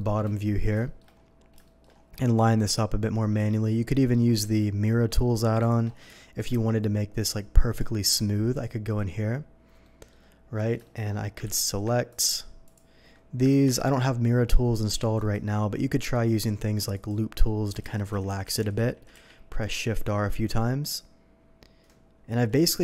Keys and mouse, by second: 0.1-6.1 shift+drag, 2.6 g, 6.1 shift+middle click, 6.4-13.3 shift+drag, 11.4 ctrl+z, 12.0 ctrl+z, 13.6 ctrl+KP_7, 17.8 shift+r, 18.2 shift+r, 18.4 shift+r.